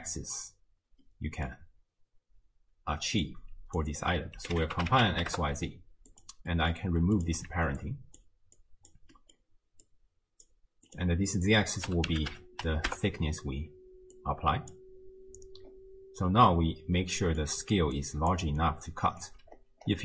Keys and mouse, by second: 1.2 middle click, 3.3-6.2 drag, 6.5 middle drag, 7.2 click, 7.5 ctrl+x, 7.8-8.2 drag, 8.6-8.9 drag, 9.2 middle click, 9.9-10.5 drag, 10.9-12.9 drag, 14.2-14.8 drag, 17.0 middle click, 17.5-18.6 d, 18.0 click, 19.0 click, 19.3 d, 19.3 d.